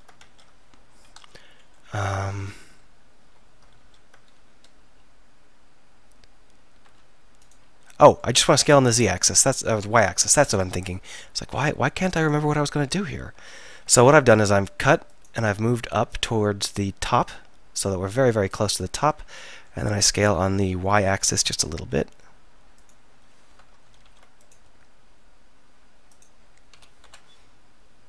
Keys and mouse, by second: 0.2 alt+., 2.4 middle click, 3.8 ctrl+., 4.8 s, 7.6 middle click, 7.9 click, 8.6 s, 12.7 middle click, 13.7 ctrl+r, 19.4 middle click, 19.9 s, 24.1 ctrl+r, 26.8 s.